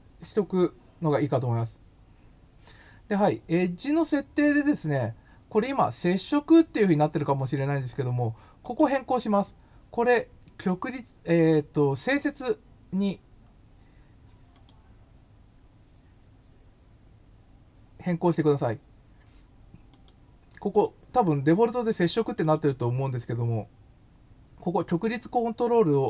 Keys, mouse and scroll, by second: 8.6 click, 14.5 click, 19.9 click, 20.7 click, 22.3 click, 25.9 click.